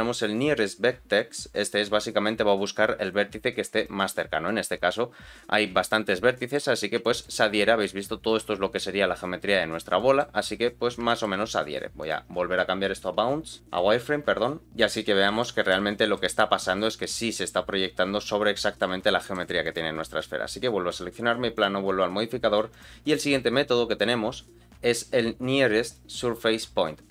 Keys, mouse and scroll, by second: 6.3 middle click, 6.7 scroll up 2, 7.0 shift+middle click, 9.5-9.9 scroll down 2, 9.9 middle click, 11.0 shift+middle click, 12.0 click, 13.6 click, 13.6-14.1 scroll down 4, 14.6 middle click, 14.6 click, 14.6 scroll down 2, 15.1 scroll up 2, 15.4 shift+middle click, 15.9 scroll down 1, 16.1-18.8 middle drag, 19.0 shift+middle click, 19.6 click, 20.6-21.0 scroll down 2, 21.5 click, 22.7 click, 23.8-26.8 drag.